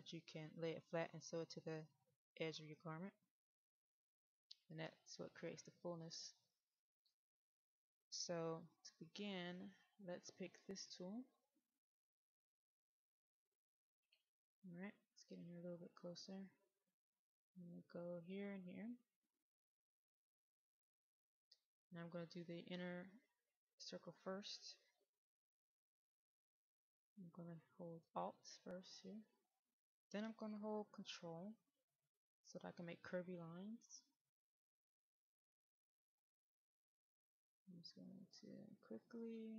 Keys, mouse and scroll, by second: 4.5-5.2 scroll down 1, 5.4-7.7 middle drag, 11.4 click, 12.7-15.1 scroll down 1, 15.1 middle click, 17.2 click, 22.3-24.1 middle drag, 29.4 alt+click, 34.8 ctrl+click, 35.8 ctrl+click, 36.7 ctrl+click, 38.0 ctrl+click, 38.9 ctrl+click.